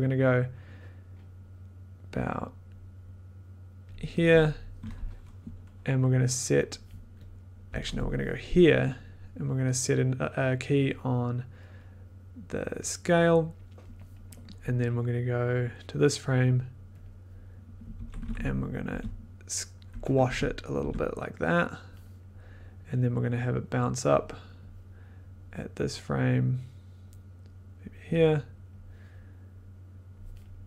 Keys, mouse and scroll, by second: 4.1-6.6 drag, 7.2 click, 7.3 middle click, 7.7 Left, 10.9 click, 11.7 right click, 12.8 click, 17.8 click, 17.9 Left, 18.8 Down, 19.8 Right, 20.3 Down, 20.8 Down, 24.2-26.2 drag, 28.0 click, 30.1 click.